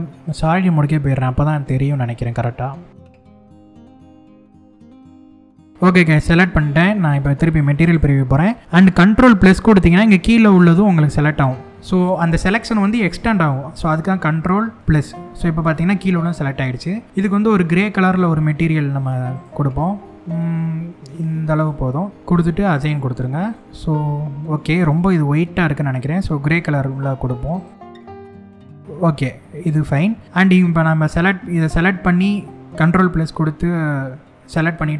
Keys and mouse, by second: 2.9 shift+click, 3.2 shift+click, 3.5 shift+click, 3.7 shift+click, 3.8 shift+click, 3.9 shift+middle click, 4.2 shift+click, 4.5 shift+click, 4.8 shift+click, 4.9 shift+click, 5.3 shift+click, 7.6 click, 8.1 middle click, 14.6 ctrl+KP_Add, 17.6 click, 18.9 click, 22.3 click, 23.0 click, 23.6 middle click, 28.8 middle click, 32.2 shift+middle click.